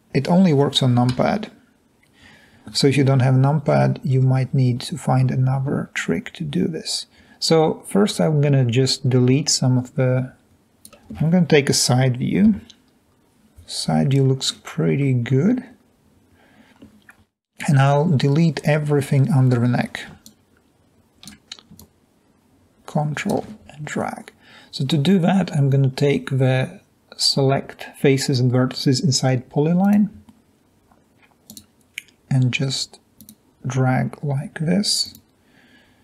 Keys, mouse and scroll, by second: 0.0-1.3 typing, 3.0-3.5 middle drag, 3.0-3.5 scroll up 1, 12.6 3, 14.2 scroll up 2, 14.5-15.3 scroll down 2, 15.3-15.6 scroll up 2, 15.6 scroll down 2, 20.3-20.7 shift+drag, 21.0 click, 21.8 ctrl+click, 33.2 click, 35.0 click.